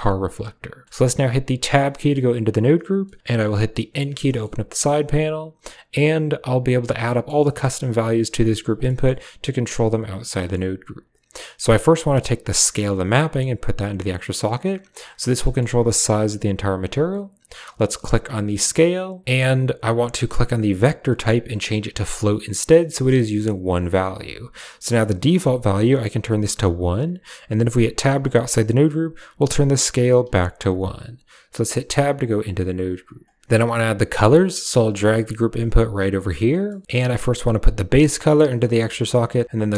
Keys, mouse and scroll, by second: 0.1 click, 0.8 middle drag, 1.6 Tab, 2.9 middle click, 3.8 n, 4.2 middle drag, 5.9 click, 7.0 middle click, 7.3 middle click, 7.7 a, 8.1 g, 8.7 click, 10.3 click, 12.9-13.8 drag, 15.3 click, 18.1 click, 19.2 Tab, 20.8-22.2 drag, 23.1 right click, 25.2-26.9 drag, 27.9 Tab, 29.2-30.6 drag, 31.4 Tab, 34.4 g, 34.9 click, 35.3 g, 36.6 click, 37.6-38.3 drag, 38.5 click, 39.6-39.7 drag.